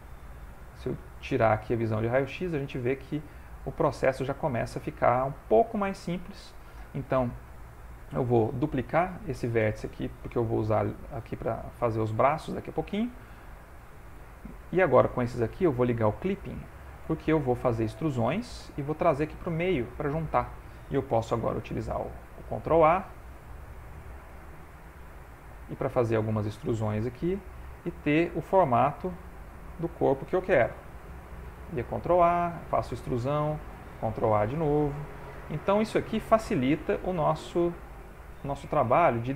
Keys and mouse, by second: 1.0 click, 1.7 middle click, 2.3 middle click, 2.8 shift+middle click, 4.2 click, 4.7 shift+middle click, 5.6 shift+middle click, 6.1 ctrl+middle click, 9.4 shift+d, 12.4 e, 15.0 click, 16.1 click, 16.6 shift+middle click, 17.1 ctrl+middle click, 18.0 e, 21.3 ctrl+a, 22.6 click, 22.8 g, 24.5 click, 25.5 e, 26.9 ctrl+a, 29.5 e, 30.7 ctrl+a, 32.5 e, 34.2 ctrl+a, 35.4 click, 36.2 click, 36.6 g, 38.1 click, 38.8 ctrl+a.